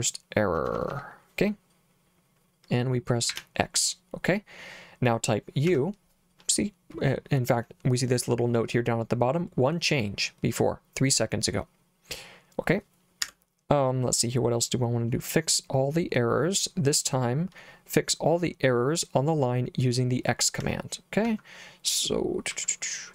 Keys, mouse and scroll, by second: 0.6 h, 0.8 h, 1.0 h, 3.4 x, 5.7 u, 13.3 Escape, 20.7 k, 21.3 h, 22.6-23.1 typing.